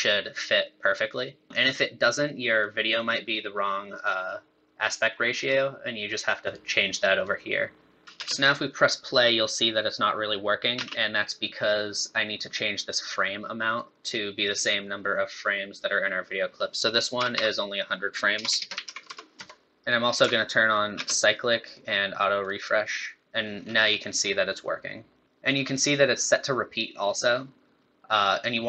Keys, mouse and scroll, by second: 2.6 click, 3.9 click, 5.4 click, 6.4 click, 7.2 click, 8.0 middle click, 8.1 space, 10.8 space, 13.7 click, 17.3 KP_0, 18.5 BackSpace, 18.6 BackSpace, 19.0 KP_0, 20.9 space, 21.6 click, 22.5 click, 23.6 scroll up 3, 24.1 scroll down 2, 25.2 scroll down 1.